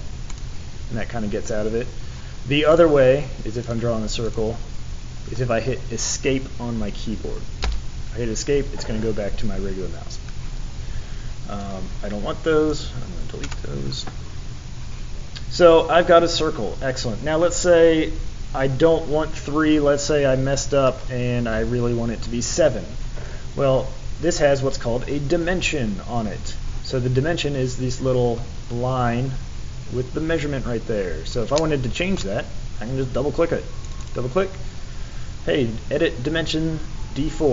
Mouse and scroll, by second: 0.3 click, 2.7 click, 3.6 click, 4.2 click, 11.6-12.7 drag.